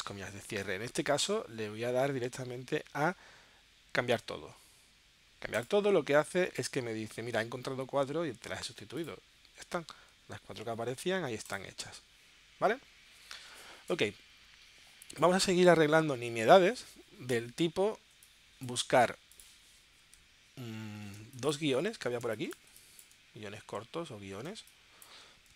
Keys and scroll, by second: 21.2 space, 22.3 space, 24.6 space.